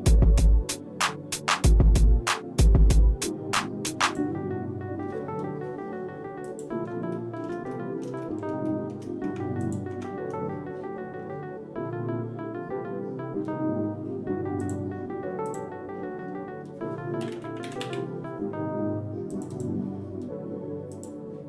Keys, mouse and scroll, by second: 6.5 click, 7.1 shift+middle click, 7.7 middle click, 8.3 shift+middle click, 8.7 shift+middle click, 9.3 Tab, 9.6 click, 9.9 Tab, 14.7 click, 15.7-20.0 drag, 21.0 click.